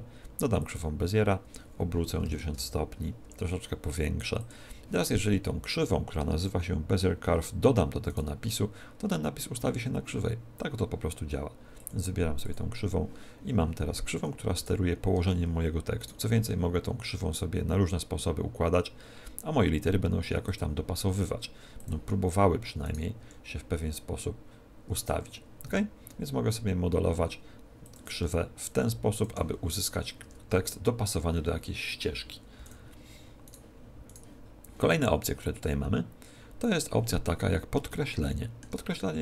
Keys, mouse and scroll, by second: 1.3 r, 3.1 s, 4.4 click, 8.1 right click, 11.7 click, 14.5 right click, 15.1 Tab, 15.9 right click, 16.3 r, 20.5 click, 21.0 s, 21.8 click, 22.7 right click, 23.1 s, 25.0 click, 25.6 r, 27.9 click, 28.1 s, 29.1 click, 30.1 Tab, 30.5-30.9 scroll down 5, 32.5 x, 33.4 right click, 34.1 right click, 37.3 scroll up 1, 37.8 shift+middle click, 37.8 scroll up 3.